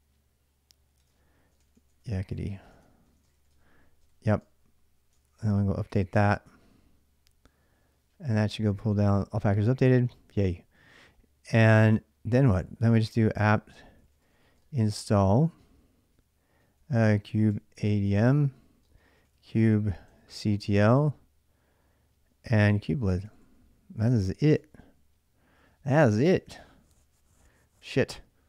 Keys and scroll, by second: 0.8 super+Tab, 1.2-4.1 typing, 5.0 ctrl+[, 5.1 k, 5.2 k, 5.7 k, 6.3 Return, 12.7-14.4 typing, 16.4-20.5 typing, 22.1-25.9 typing.